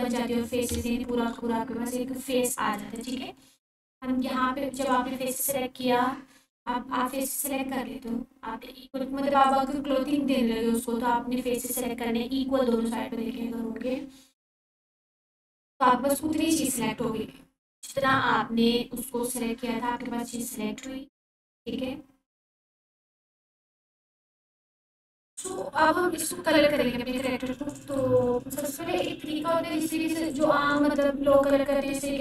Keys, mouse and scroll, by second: 0.0 ctrl+4, 2.9 click, 9.4-15.7 drag, 20.3 click, 24.4 alt+q, 25.4 click, 27.2-27.8 ctrl+alt+click, 28.8 Tab, 30.2-30.9 drag, 32.1-32.2 scroll up 1.